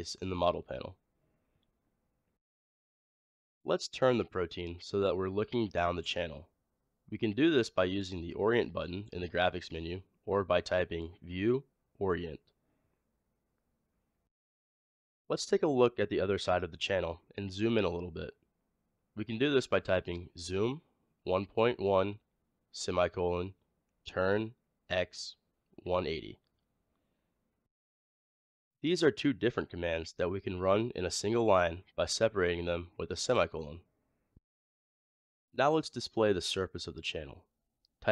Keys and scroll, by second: 10.7 typing, 18.9-19.8 typing.